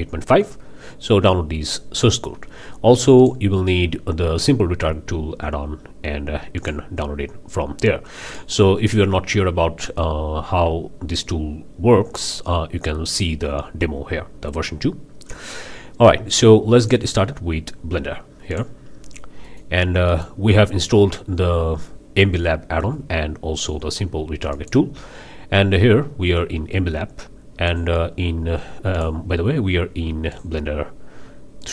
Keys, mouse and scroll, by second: 3.2 click, 6.6 click, 8.3 drag, 9.6 scroll down 1, 15.2-15.8 scroll up 2, 16.8 click, 18.5 click, 19.4 click, 19.8 scroll up 2, 20.1 click, 22.8 n, 24.5 click, 27.7 click, 28.9 click, 30.3 click, 31.6 click.